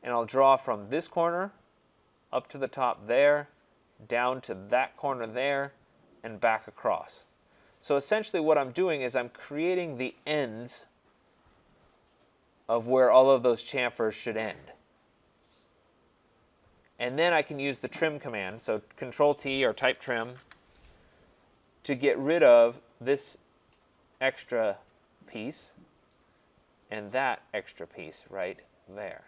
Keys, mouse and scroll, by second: 1.0 click, 3.1 click, 5.2 click, 7.1 click, 8.5 click, 17.3 right click, 19.6-20.7 typing, 22.9 click, 24.0 click, 24.9 click, 26.1 right click, 26.9 click, 28.1 click, 28.8 scroll down 2.